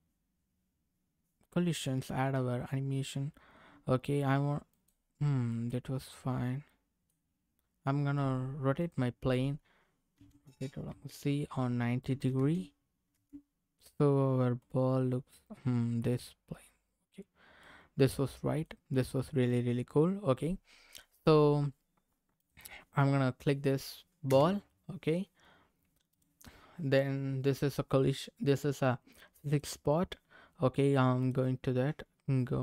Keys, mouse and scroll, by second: 4.7 click, 5.5 middle click, 8.8 click, 10.1 r, 10.9 z, 12.0 KP_9, 12.3 KP_0, 13.1 KP_Enter, 14.6 middle click, 16.4 scroll up 1, 17.1 scroll down 1, 17.6 middle click, 22.3 click, 24.3 KP_0, 26.2 click, 29.5 click, 31.2 click.